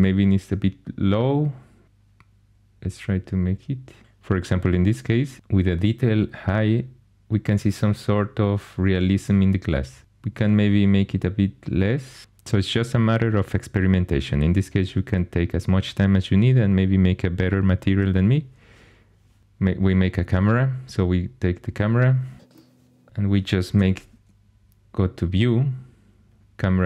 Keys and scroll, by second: 22.5 0, 23.9 n.